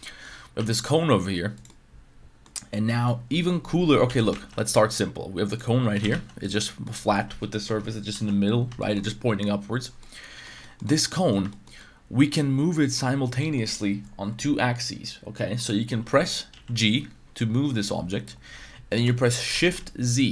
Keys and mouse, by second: 0.0 middle drag, 0.5 r, 1.5 click, 1.7-2.4 middle drag, 2.7 middle click, 4.1 x, 4.3 shift+a, 5.9 g, 6.1 z, 6.4 click, 6.6 middle drag, 8.1 ctrl+z, 8.8 shift+middle drag, 10.0-10.4 middle drag, 10.6 shift+middle drag, 10.9 middle drag, 11.1 middle click, 11.5 shift+middle drag, 11.8-13.2 middle drag, 13.4 middle drag, 16.5 g, 19.5 shift+z.